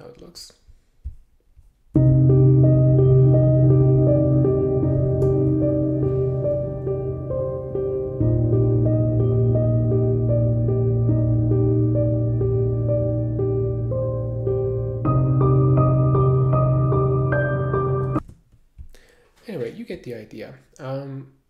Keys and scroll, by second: 5.3 super+\, 17.9 alt+\.